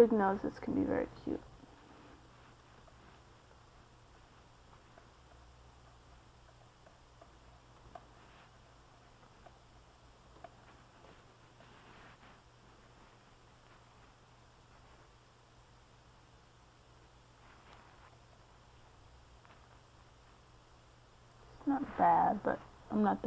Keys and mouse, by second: 4.4-9.6 middle drag, 7.5 click, 7.5 right click, 10.2 click, 11.9 middle click, 21.1-22.3 middle drag.